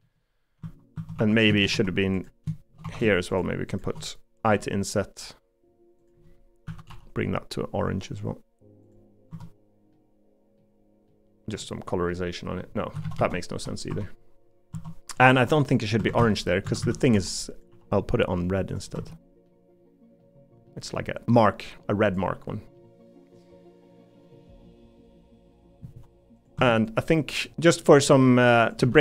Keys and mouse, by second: 0.6 Tab, 1.1 3, 1.7 Tab, 2.8 3, 4.4 i, 6.6 a, 6.9 g, 9.3 Tab, 9.9 middle click, 11.1 middle click, 12.1 middle click, 13.0 ctrl+z, 13.9 Tab, 16.2 a, 16.6 a, 17.1 b, 17.7 g, 18.9 Tab, 19.4 middle click, 20.6 middle click, 21.3 middle click, 22.7 middle click, 23.4 middle click, 24.2-25.5 middle drag, 26.5 Tab, 27.8 middle click, 28.8 l.